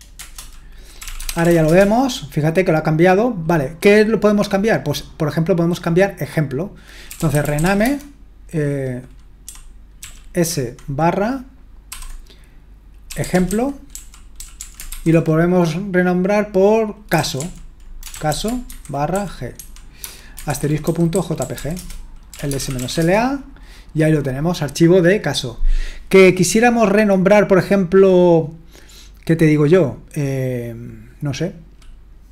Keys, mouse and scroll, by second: 0.1 Return, 0.7-2.0 typing, 6.8-8.1 typing, 9.7-10.5 typing, 11.9-15.4 typing, 16.9-23.5 typing.